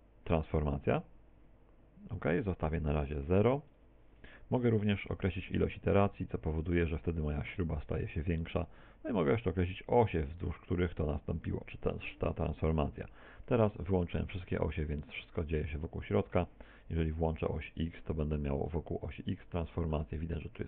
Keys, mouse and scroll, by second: 3.2 click, 5.6 click, 6.2 click, 6.8 click, 19.0 middle click.